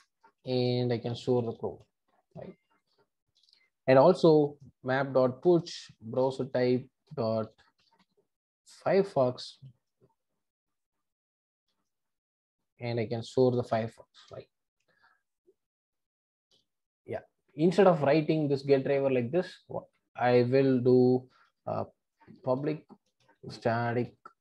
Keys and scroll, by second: 5.5 Return, 14.2 Return, 23.3 Return.